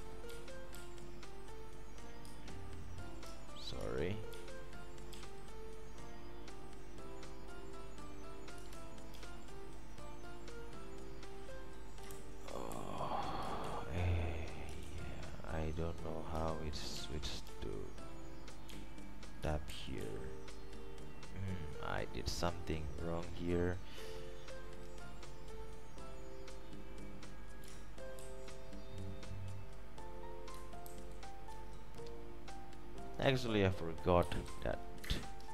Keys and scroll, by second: 4.5 super+q, 9.3 alt+q, 12.3 ctrl+Left, 12.9 ctrl+Left, 13.8 alt+F4, 15.0 alt+F4, 19.9 alt+4, 19.9 alt+5, 20.2 alt+6, 28.3 ctrl+alt+v, 31.0 alt+shift+v, 34.2-35.2 typing, 35.3 Up.